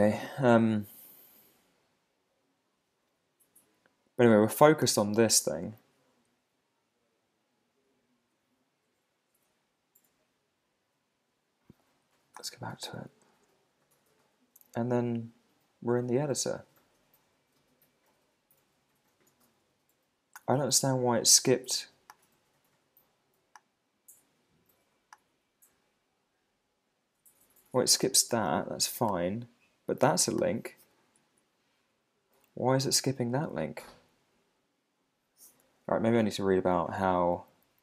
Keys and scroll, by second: 12.8 Tab, 31.2 Right, 31.8 Down, 32.3 Up, 37.3 Up.